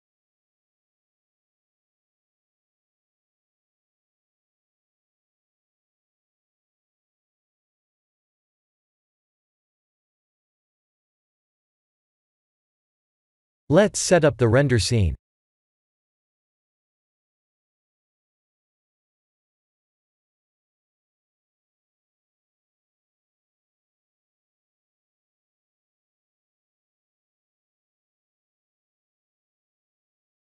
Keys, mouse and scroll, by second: 0.1 shift+d, 2.7 g, 4.2 middle click, 5.4 middle click, 9.5 middle click, 10.2 click, 10.5 b, 11.1 x, 12.3 middle click, 13.8 ctrl+alt+KP_0, 14.4 shift+`, 21.1 click, 21.3 shift+a, 22.9 s, 24.0 KP_3, 24.7 g, 27.5 KP_0, 29.6 s.